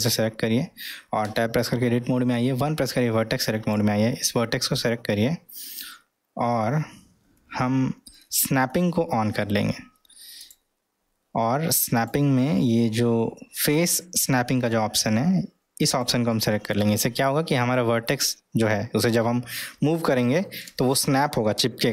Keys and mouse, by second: 1.3 Tab, 2.6 1, 3.4-3.8 drag, 4.7-5.9 middle drag, 7.4 o, 10.4 click, 11.9-19.5 drag.